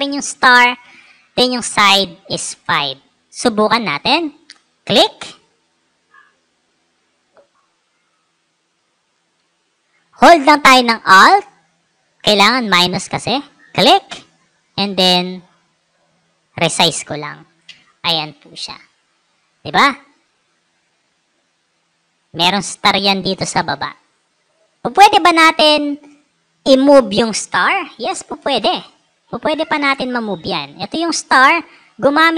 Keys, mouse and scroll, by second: 6.3-8.0 drag, 8.9 Escape, 13.3-17.1 alt+drag, 20.0 click, 29.5 click, 32.1 right click.